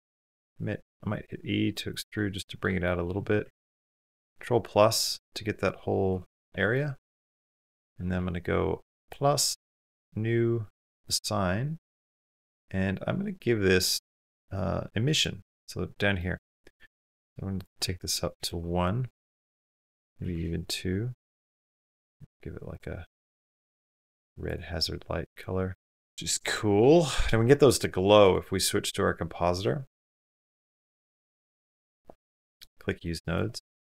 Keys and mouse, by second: 0.2 e, 2.2 click, 4.1 ctrl+KP_Add, 5.9 KP_Decimal, 7.5 middle click, 8.8 click, 10.7 click, 14.9 click, 17.4 click, 19.4 click, 21.3 click, 25.1 click, 26.1 KP_0, 27.5 click, 28.1-31.3 drag, 32.4 click, 33.5 click, 33.6 g.